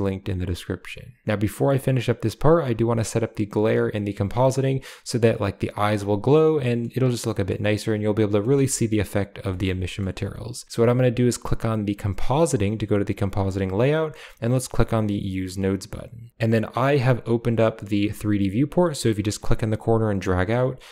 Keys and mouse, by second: 5.8-6.7 middle drag, 7.1 middle click, 8.3 shift+middle click, 9.3 shift+middle click, 9.7 middle click, 15.8 click, 17.5 click.